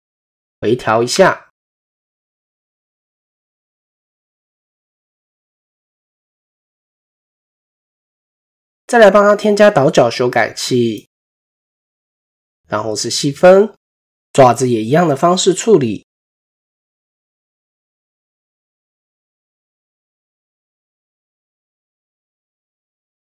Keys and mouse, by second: 0.4 s, 2.0 s, 2.7 Tab, 3.1-3.4 middle drag, 4.1-5.0 middle drag, 5.4 KP_1, 6.3 shift+middle click, 11.5 click, 12.7 ctrl+2, 13.4 click, 15.3 click, 16.6 click, 18.2 ctrl+2, 19.2 click, 20.6 shift+click, 21.2 Tab, 22.5 click, 22.9 click.